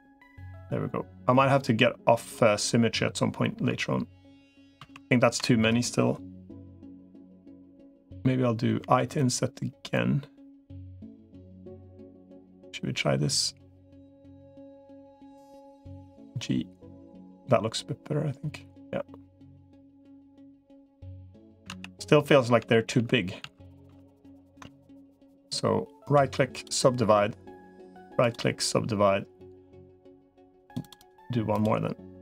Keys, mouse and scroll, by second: 4.6 ctrl+z, 8.6 |, 15.8 g, 21.6 ctrl+z, 22.4 ctrl+z, 22.8 ctrl+z, 23.2 ctrl+z, 23.6 ctrl+z, 24.0 ctrl+z, 25.8 right click, 27.6 right click, 30.4 click, 31.4-32.2 drag.